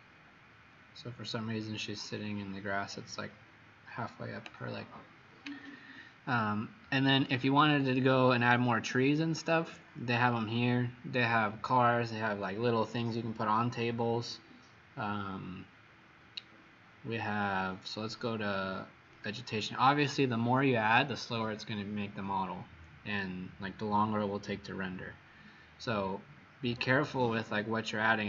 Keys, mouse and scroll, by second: 1.5-4.3 scroll down 6, 7.2 click, 27.2-27.7 scroll down 1, 27.7-28.2 scroll down 3.